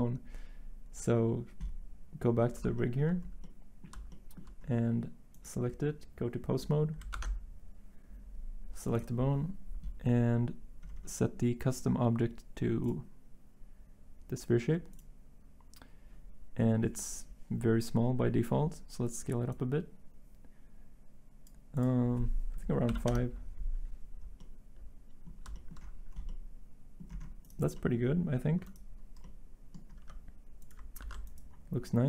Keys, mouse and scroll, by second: 7.1 ctrl+Tab, 23.6-27.9 Return, 29.5-30.0 typing, 31.0 ctrl+z.